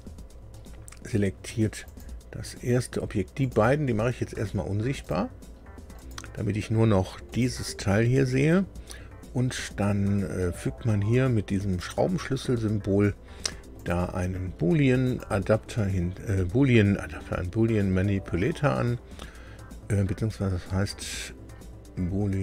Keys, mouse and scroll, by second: 1.8 click, 3.4 right click, 3.5 click, 5.0 click, 5.9 right click, 7.3 click, 11.7 right click, 13.7 right click, 15.0 right click.